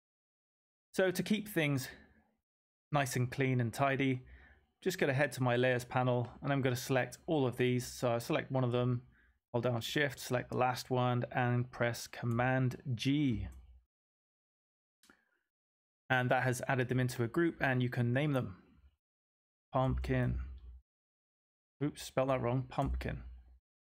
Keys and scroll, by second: 13.2 super+g, 18.8-20.7 typing, 22.8 typing.